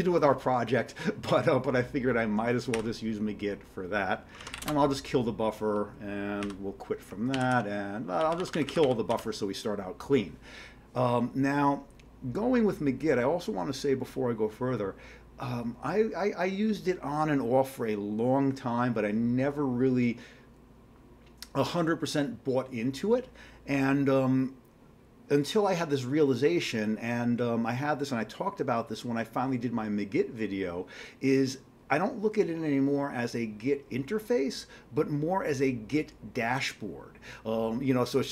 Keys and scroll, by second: 2.8 q, 4.4 ctrl+x, 4.6 k, 6.5 q, 7.3 ctrl+x, 7.5 ctrl+b, 8.0-9.6 typing.